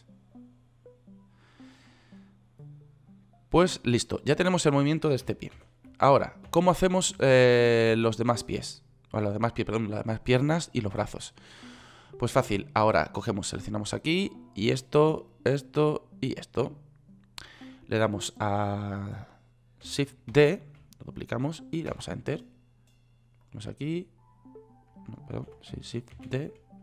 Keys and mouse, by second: 6.1 ctrl+z, 7.0 ctrl+z, 7.8 ctrl+z, 8.4 ctrl+z, 20.8 shift+d, 22.4 Return, 25.9 ctrl+z, 26.6 shift+d.